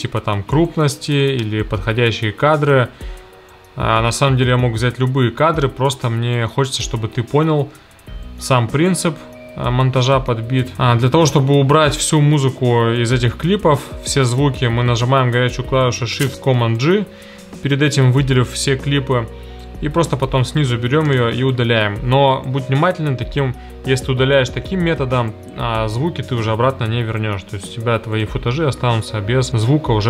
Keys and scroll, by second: 16.6 shift+super+g, 21.0 BackSpace.